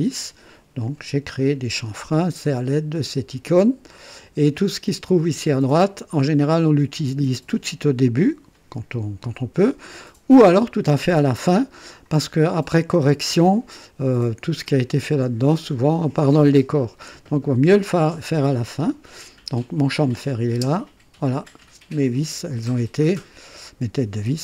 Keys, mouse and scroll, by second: 0.8 click, 20.0 click, 20.6 space, 21.2 click, 22.0-23.7 drag.